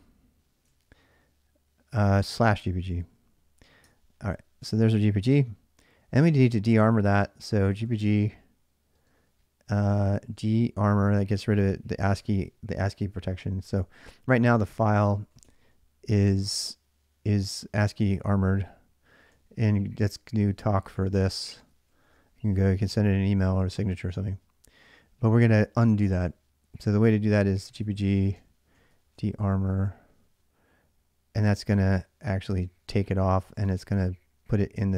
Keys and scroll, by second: 0.3-1.0 typing, 1.8 ctrl+a, 2.0 ctrl+a, 2.2-3.4 typing, 3.6 Return, 7.2-11.8 typing, 12.0 Tab, 13.6 ctrl+a, 13.8-15.9 typing, 18.7-19.5 typing, 19.9 Return, 20.7-22.8 typing, 25.2-29.6 typing, 32.0 Return, 33.1-34.8 typing.